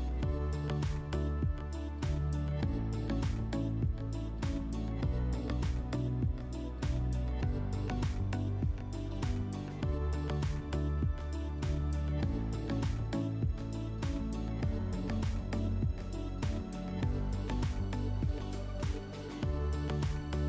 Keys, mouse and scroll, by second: 1.0-4.0 drag, 4.3 Delete, 5.5-6.8 drag, 6.8 Delete, 7.5 click, 7.8 click, 8.2-9.4 drag, 9.8-10.7 drag, 13.3-14.9 drag, 17.2 /, 18.3 click, 18.5 click, 18.6 click, 19.2-20.1 typing.